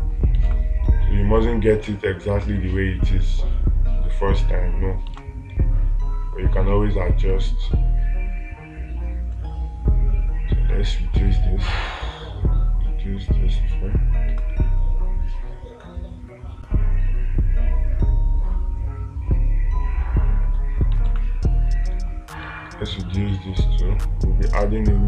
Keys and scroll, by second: 0.9 space, 5.6 space, 21.5 space.